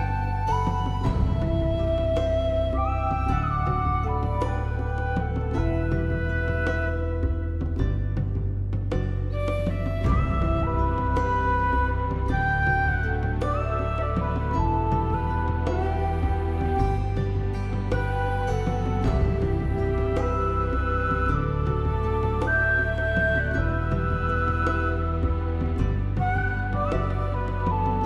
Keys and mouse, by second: 0.2 middle click, 0.4 shift+middle click, 0.7 alt+z, 0.9 click, 1.1 alt+z, 1.3 g, 1.9 click, 2.2 alt+z, 2.4 click, 3.7 click, 4.4 g, 5.6 click, 6.0 shift+middle click, 6.3 shift+middle click, 6.6 ctrl+z, 7.0 g, 7.5 click, 7.9 shift+middle click, 8.6 click, 9.1 click, 9.6 g, 9.7 middle click, 10.0 right click, 10.4 click, 10.8 click, 11.3 g, 11.4 middle click, 12.8 right click, 12.9 g, 13.0 middle click, 13.4 click, 13.7 middle click, 13.8 alt+middle click, 13.9 middle click, 14.1 alt+z, 14.2 shift+middle click, 14.6 middle click, 15.0 alt+middle click, 15.1 alt+middle click, 15.4 alt+middle click, 15.5 shift+middle click, 15.9 shift+middle click, 16.2 click, 16.8 g, 17.7 click, 18.0 click, 18.2 alt+z, 18.4 g, 19.2 click, 19.4 click, 19.6 click, 19.8 g, 20.6 click, 20.9 click, 21.1 g, 21.5 click, 21.8 alt+z, 22.0 middle click, 22.4 alt+middle click, 22.6 alt+middle click, 22.8 alt+middle click, 23.0 shift+middle click, 23.3 shift+click, 23.5 alt+z, 24.1 g, 24.5 click, 24.8 g, 25.4 g, 25.5 click, 25.9 alt+z, 26.0 alt+middle click, 26.2 alt+middle click, 26.5 Tab, 26.7 shift+middle click, 26.9 Tab, 27.3 alt+z, 27.4 click, 27.9 g.